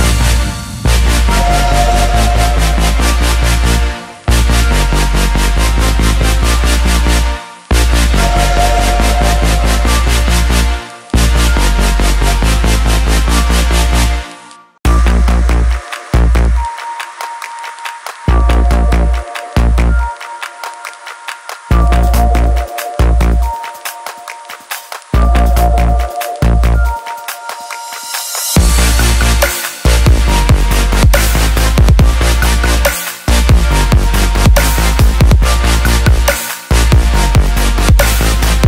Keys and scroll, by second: 11.8-13.5 typing, 14.2 Return, 18.0 ctrl+=.